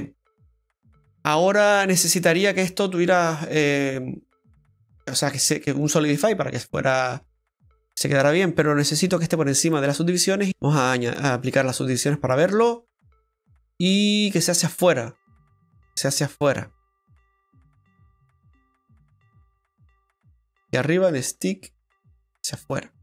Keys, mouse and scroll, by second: 3.7 middle click, 3.7 click, 6.9 middle click, 9.6 click, 11.0 click, 12.3 middle click, 13.5-13.8 scroll up 2, 13.9 middle click, 17.2 click, 21.1 click.